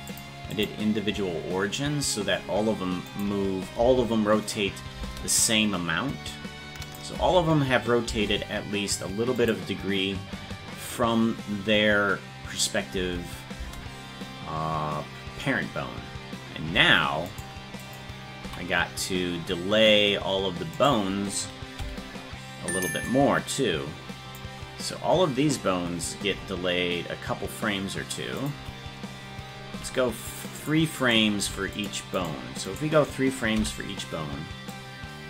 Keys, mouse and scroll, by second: 0.1 click, 0.5-2.1 drag, 3.1 click, 3.8 space, 6.9 click, 7.2 space, 9.4 click, 13.0 space, 17.3 right click, 17.9 click, 18.5 c, 21.8 b, 31.0 right click, 31.5 c, 32.7 right click, 33.6 b.